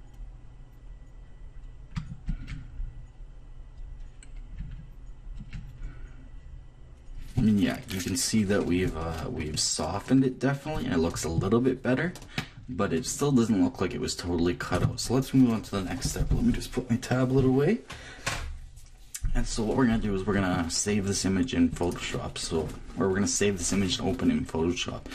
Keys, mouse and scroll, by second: 2.2-7.6 drag, 9.3-12.1 middle drag, 21.8-23.7 drag.